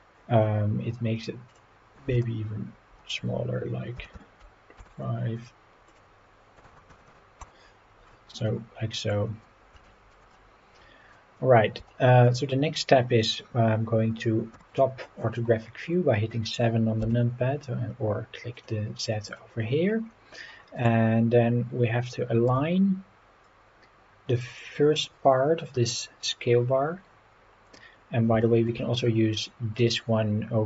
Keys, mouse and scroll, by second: 1.5-4.8 drag, 5.9-7.4 drag, 8.5-9.1 middle drag, 9.3 scroll down 2, 9.9 shift+middle click, 10.3-11.1 middle drag, 11.9-12.3 shift+middle drag, 14.5 KP_7, 17.0 n, 18.6 click, 19.3 click, 20.1 scroll down 1, 20.8 click, 22.5 g, 24.5 click, 24.8 scroll up 3, 27.3-27.7 scroll up 3, 27.9 scroll down 2, 28.4 shift+middle drag.